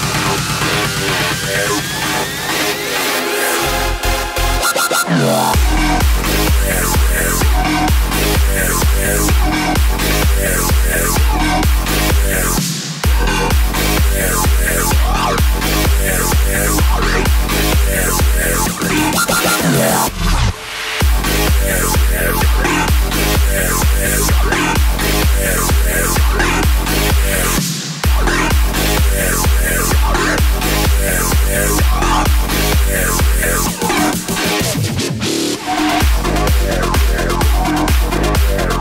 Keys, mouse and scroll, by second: 2.1-5.3 drag, 5.3 space, 7.0-14.5 drag, 16.6 click, 21.1 click, 22.6 x, 23.4 click, 24.2 x, 25.0-26.2 drag, 26.2 space, 28.7 space, 30.3 click, 31.2-33.4 drag, 33.4 x, 34.3 click, 35.4 x, 36.1-37.3 drag, 37.3 space.